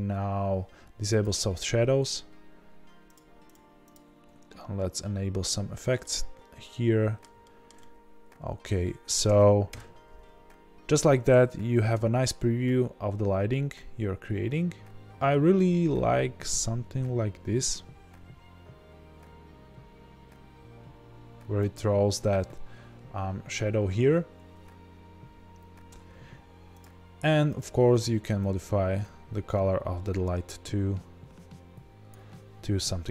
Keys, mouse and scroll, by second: 1.0 click, 3.0 click, 3.4-3.9 drag, 5.9 middle click, 7.4-28.3 shift+middle drag, 9.6 KP_0, 10.4-11.7 scroll up 1, 11.7 r, 21.7 click, 24.2-25.1 scroll down 2, 25.1-28.2 scroll up 2, 28.2 scroll up 1, 28.3 click.